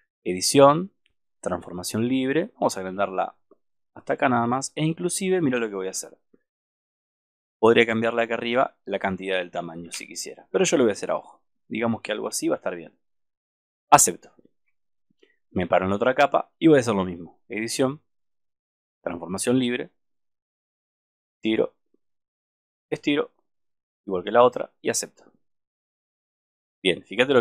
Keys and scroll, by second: 5.9 super+=, 10.0 super+-.